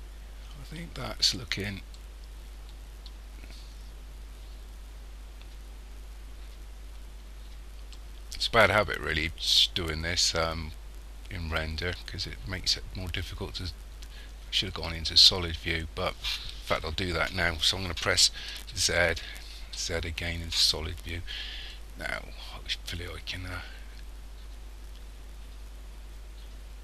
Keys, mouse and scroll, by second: 2.0 middle click, 8.0 middle click, 19.7 z, 23.0 middle click.